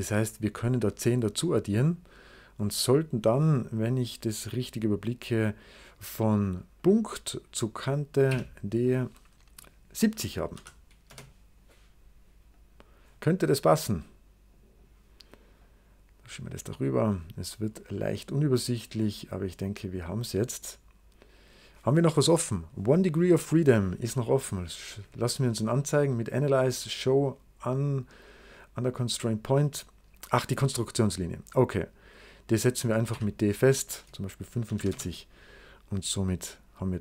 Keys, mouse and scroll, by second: 0.7-2.0 drag, 6.7 click, 7.8 click, 8.2 d, 10.1-10.9 typing, 10.9 Return, 12.4 click, 13.9 click, 15.5 click, 17.0 scroll up 2, 18.3 click, 19.6-21.4 drag, 24.6 click, 28.7 click, 30.7 click, 31.5 click, 32.3 click, 33.0 d, 34.2-35.1 typing, 36.2-37.0 drag.